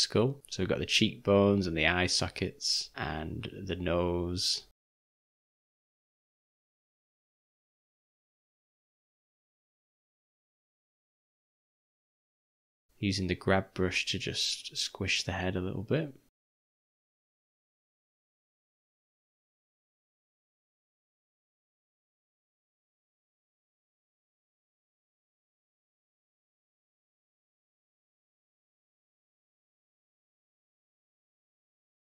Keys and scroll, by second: 1.4 ], 1.6 ], 5.4 v, 10.8 g, 11.3 ], 11.6 ], 11.7 ], 15.5 [, 15.7 [, 19.3 [, 19.5 [, 29.9 v, 31.5 u.